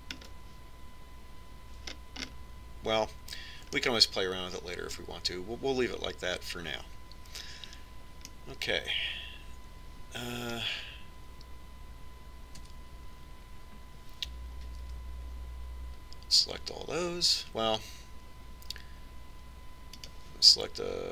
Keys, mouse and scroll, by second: 1.6-6.9 middle drag, 9.8-11.5 middle drag, 11.6 middle click, 14.0 Tab, 16.3 l.